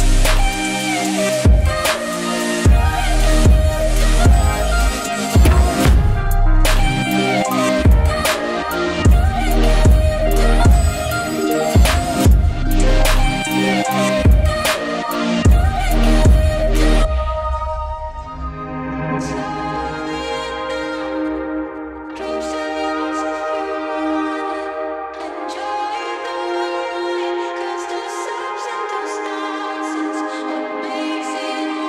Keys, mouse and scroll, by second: 1.6 right click, 2.3 click, 4.3 Return, 4.9-9.9 typing, 12.0 click, 13.5 right click, 14.2-31.8 drag, 14.8 typing.